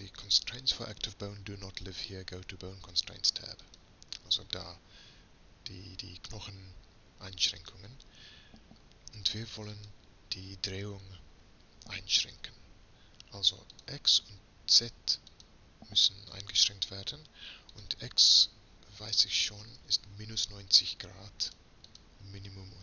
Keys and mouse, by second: 14.0-19.6 drag.